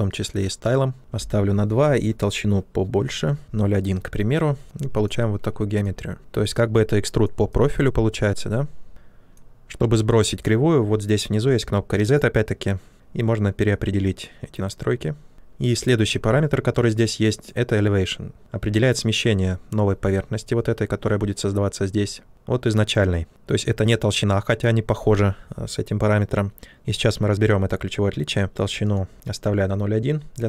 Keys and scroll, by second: 0.9 Return, 0.9 typing, 3.1-3.8 typing, 15.3 shift+f.